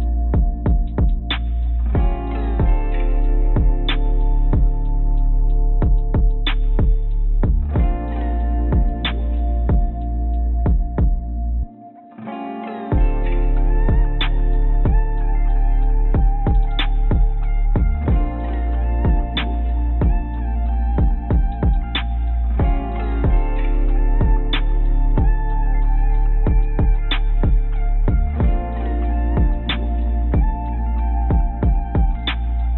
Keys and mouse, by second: 2.2 click, 3.9 drag, 4.5 click, 10.7 ctrl+z, 10.9 ctrl+z, 11.2 ctrl+z, 14.5 click, 16.1 click, 16.5 click, 17.1 click, 18.7 click, 20.0 click, 20.7 click, 21.6 click, 21.9 click, 22.0 click, 22.1 click, 22.3 click, 23.8 click, 24.0 click, 24.1 click, 24.4 click, 24.6 click, 24.9 click, 25.7 click, 26.4 click, 27.0 click, 27.9 click, 28.4 click, 30.8 click, 31.7 click.